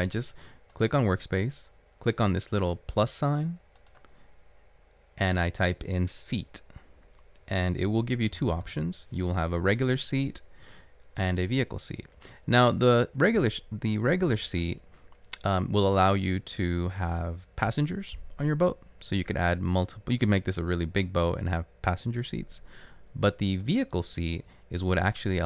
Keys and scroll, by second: 8.3-9.3 typing.